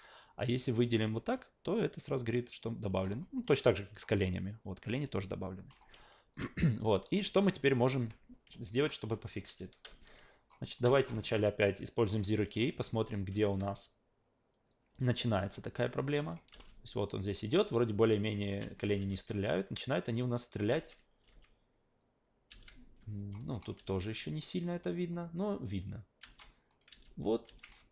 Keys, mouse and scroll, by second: 0.7 click, 3.0 alt+middle click, 3.9 click, 5.7 ctrl+z, 6.3 alt+right click, 6.6 alt+middle click, 7.7 click, 8.0 a, 8.6 alt+right click, 8.9 alt+middle click, 9.9-10.5 alt+drag, 11.6-12.1 drag, 12.4 alt+middle click, 12.9 alt+middle click, 13.9-16.3 drag, 16.5 alt+v, 17.5 alt+middle click, 17.9 alt+click, 18.7 alt+v, 19.0 alt+v, 20.8 alt+v, 21.3 alt+v, 22.5 alt+v, 23.2 click, 23.5 alt+middle click, 23.7 alt+v, 26.2 alt+v, 26.4 alt+middle drag, 26.9 alt+v, 27.4 alt+v.